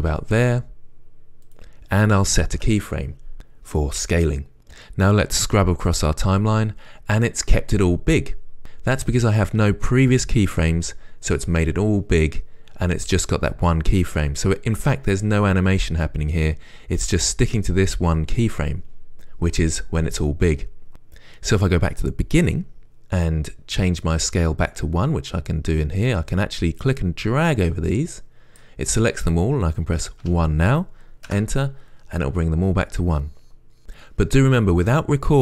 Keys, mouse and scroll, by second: 2.4 click, 6.2-8.2 right drag, 9.2-13.1 right drag, 22.5-31.6 right drag, 31.6-35.4 drag, 31.6 Return.